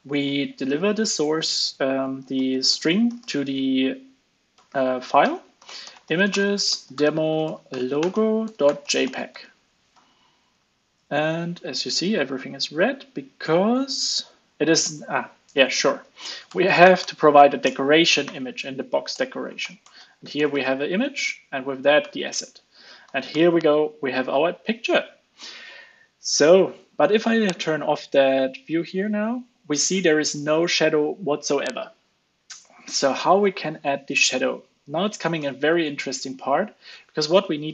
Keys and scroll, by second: 9.4 super+s, 15.5 alt+Up, 16.0 super+x, 20.7 super+v, 21.6 super+s, 22.0 alt+super+l, 22.2 super+s, 23.3 alt+super+l, 23.5 super+s, 36.4 super+s.